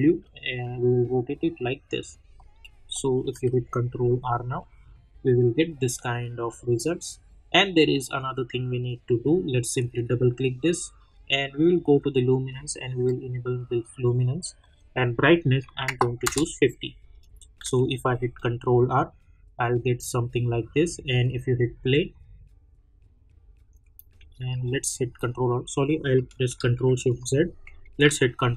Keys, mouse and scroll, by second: 0.2-2.3 drag, 2.3 middle click, 3.4 ctrl+r, 9.8 click, 16.2 Return, 17.2 click, 17.6 ctrl+r, 21.1 click, 23.7 click, 24.4 ctrl+r, 26.9 ctrl+shift+z, 28.0 ctrl+r.